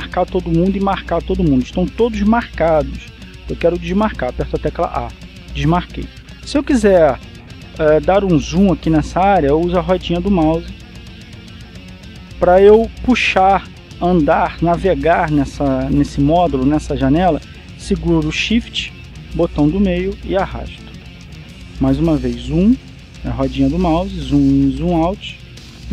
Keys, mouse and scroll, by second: 5.9 a, 10.9-11.9 scroll up 1, 12.1-13.3 scroll up 1, 20.3-22.9 shift+middle drag, 23.0-23.9 scroll up 1, 23.9 scroll up 1, 24.2-24.9 scroll down 1, 24.9-25.4 scroll up 1, 25.4-25.9 scroll down 1.